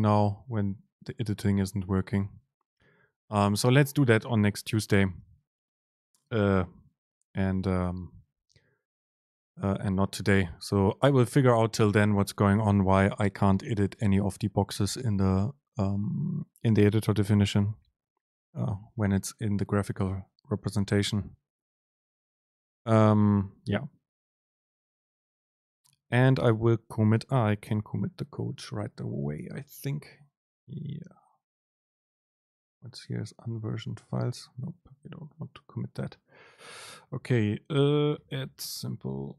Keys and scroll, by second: 27.8 super+k.